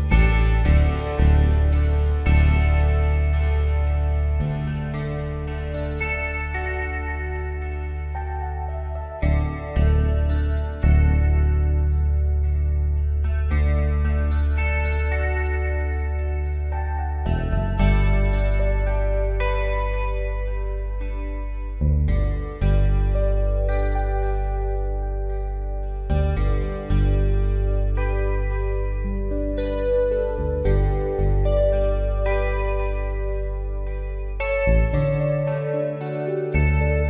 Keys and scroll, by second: 1.6 ctrl+z, 3.7-4.8 typing, 6.0-6.7 typing, 8.1-9.1 typing, 16.3 ctrl+t, 18.2 Return, 19.5 Up, 20.3-21.7 typing, 23.6 ctrl+z, 26.2-27.0 typing, 30.9 ctrl+z, 31.7-32.3 typing, 33.7 v, 36.6 ctrl+b.